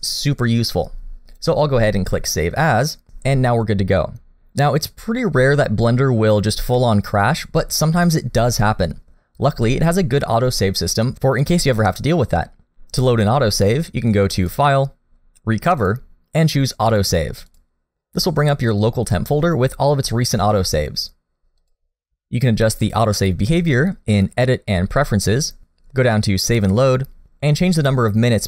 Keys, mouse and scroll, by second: 6.8 middle click, 14.4 click, 24.1 click.